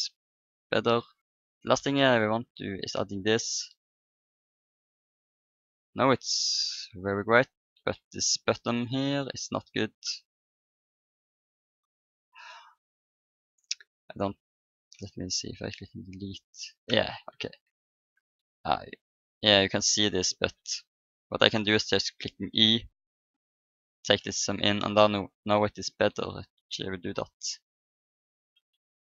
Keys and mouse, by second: 1.1-2.9 drag, 3.4-6.9 middle drag, 6.4 Tab, 7.2 Tab, 10.7-13.1 drag, 13.4-14.7 right drag, 14.7 Delete, 17.6 ctrl+z, 18.1 Tab, 19.3 Tab, 22.2 i, 23.9 Tab, 25.0 click, 25.9 Tab, 27.1 s, 28.5 Tab.